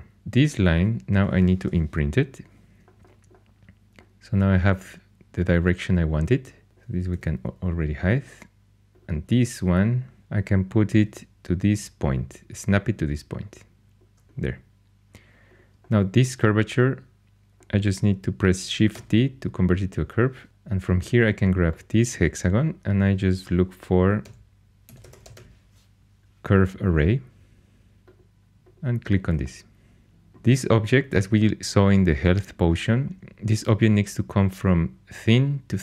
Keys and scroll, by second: 1.6 Tab, 7.1 h, 11.0 g, 18.9 shift+d, 24.2-25.8 typing.